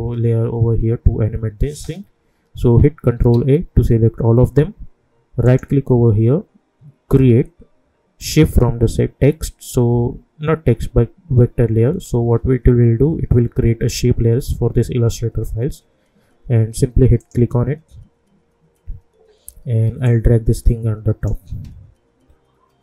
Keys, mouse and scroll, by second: 3.3 ctrl+a, 5.4 right click, 17.2 click, 20.0-22.8 drag.